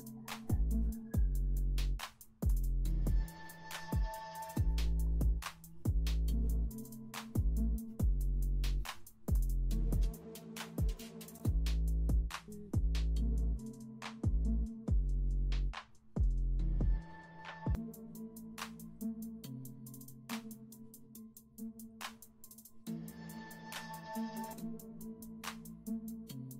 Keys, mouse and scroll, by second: 25.2 ctrl+z.